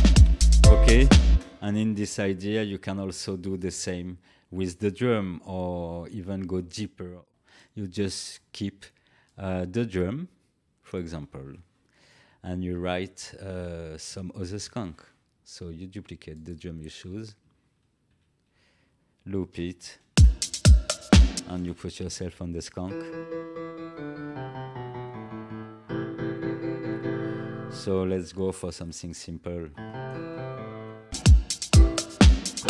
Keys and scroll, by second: 1.2 space, 18.0 ctrl+d, 19.5 ctrl+l, 20.0 space, 21.3 space.